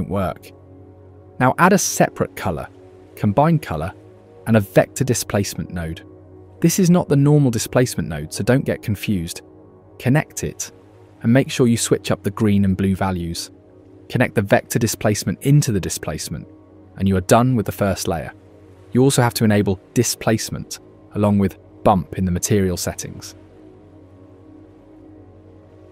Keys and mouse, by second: 1.3 shift+a, 2.0 shift+a, 3.4 shift+a, 6.2 click, 7.1 click, 8.8-9.4 drag, 9.8-10.4 drag, 10.9 click, 12.2 click, 13.8-14.8 drag, 15.4 click, 15.7 click, 16.6 ctrl+shift+click, 20.4 click, 21.9 click, 23.4 click, 23.8-25.6 drag.